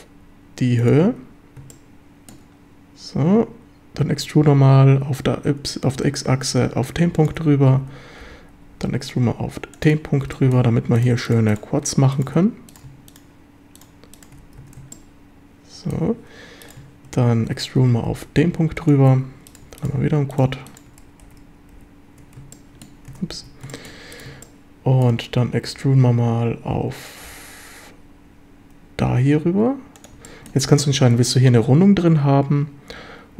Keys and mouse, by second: 1.8-2.3 shift+middle drag, 4.9 x, 7.2 ctrl+click, 7.8 e, 8.2 x, 9.7 ctrl+click, 10.4 shift+middle click, 12.4 f, 14.4 f, 14.6 a, 14.9-16.0 shift+middle drag, 17.5 e, 17.8 x, 18.8 ctrl+click, 21.2 d, 21.7 f, 22.6 shift+drag, 23.3 a, 23.7 shift+click, 24.4 shift+click, 25.7 e, 27.3 x, 29.9 click, 30.2 shift+middle click.